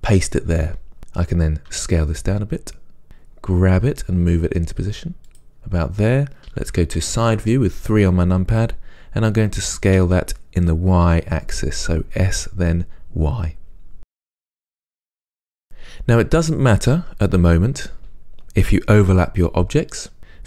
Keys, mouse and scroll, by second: 1.9 s, 3.1 click, 4.0 g, 5.6 click, 7.2 KP_3, 10.2 s, 14.4 click, 14.5-20.4 middle drag.